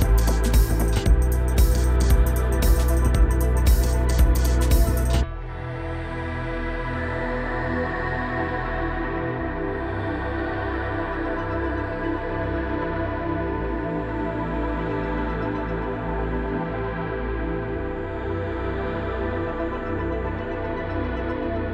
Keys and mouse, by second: 1.3 click, 1.6-2.1 shift+drag, 3.1 shift+click, 3.8-4.3 drag, 5.4-8.4 drag, 10.4 click, 10.9 click, 11.2 drag, 11.5 click, 12.9 click, 13.2-17.4 drag, 17.6 shift+click, 18.8 click, 19.2 shift+click, 20.9-21.7 drag.